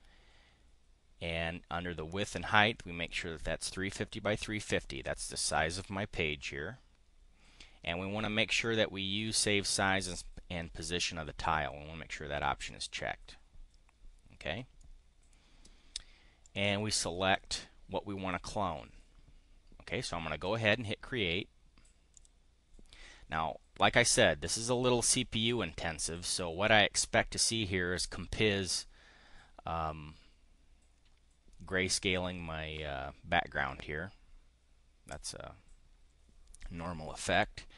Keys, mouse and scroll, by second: 14.7 click, 16.2-17.3 drag, 22.1 click.